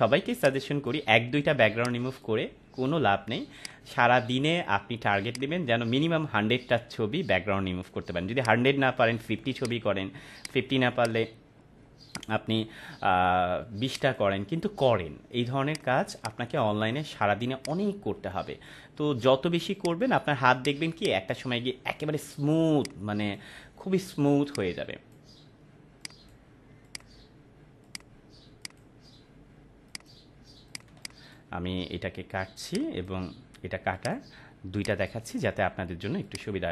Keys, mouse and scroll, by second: 16.0 space, 16.2-16.8 click, 16.5 space, 17.6-18.8 drag, 20.7 space, 20.9-21.5 click, 21.2 space, 22.8-23.4 click, 30.9 space, 31.0 click, 31.4 space, 32.7-33.3 drag.